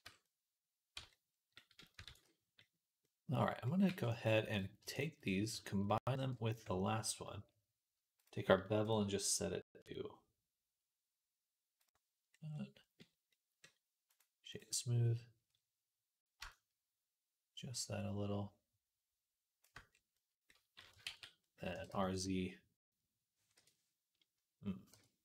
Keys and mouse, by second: 0.1 click, 0.3 click, 0.8 Tab, 0.8 middle click, 1.9 ctrl+s, 2.4-4.8 middle drag, 3.7 b, 4.8 shift+click, 4.9-8.1 middle drag, 6.2 ctrl+j, 8.1-14.7 drag, 14.0 middle click, 14.0 right click, 19.7 middle click, 20.8-23.9 ctrl+middle drag, 21.0 ctrl+s, 21.6 r, 24.8 KP_1.